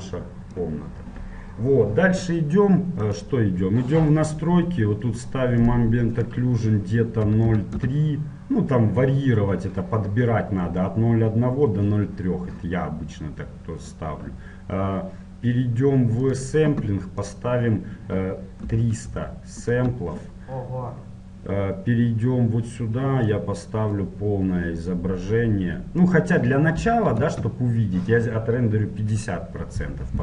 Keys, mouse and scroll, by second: 3.3-5.2 drag, 5.8-8.3 drag, 14.0-15.9 drag, 14.7-17.4 middle drag, 16.5-19.2 drag, 19.4 KP_0, 21.0-23.1 middle drag, 23.5-25.2 drag, 26.2-28.2 drag.